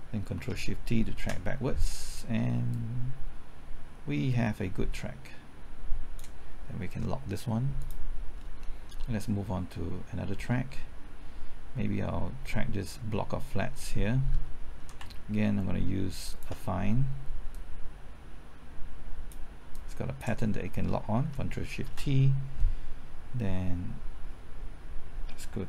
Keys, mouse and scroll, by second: 1.1 ctrl+shift+t, 2.7-6.4 drag, 6.9 middle click, 7.7 click, 8.3 scroll down 1, 8.6 middle click, 12.4-12.9 scroll up 1, 12.9 middle click, 13.3-13.9 scroll up 1, 13.9 middle click, 16.2 ctrl+click, 17.5-19.4 drag, 21.8 ctrl+shift+t.